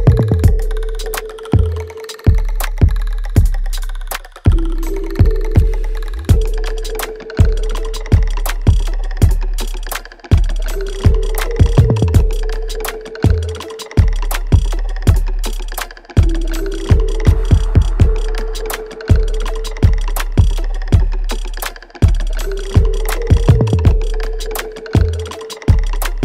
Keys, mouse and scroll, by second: 1.0 shift+click, 2.7 ctrl+z, 3.3 shift+click, 4.9 alt+right click, 5.3-6.6 alt+drag, 6.6 alt+right click, 7.1-10.3 alt+drag, 10.3 alt+right click, 11.2 alt+click, 11.6 alt+middle click, 12.0-13.5 alt+right drag, 13.5 click, 15.9 click, 21.7 click, 22.0 alt+middle click, 22.5 alt+right click, 23.5 alt+middle click, 24.0-26.2 alt+right drag.